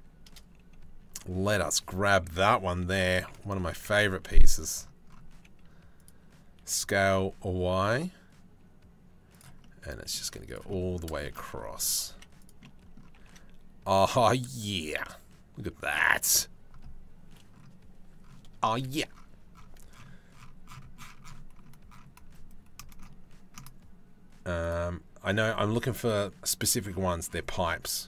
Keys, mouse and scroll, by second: 0.8 middle click, 2.5 r, 3.4 KP_7, 3.7 z, 5.0 g, 6.2 s, 9.2 middle click, 9.9 z, 10.5 middle click, 10.9 shift+middle click, 11.0 middle click, 11.6 g, 12.3 middle click, 12.8 g, 14.5-15.5 middle drag, 15.5 click, 24.3 click.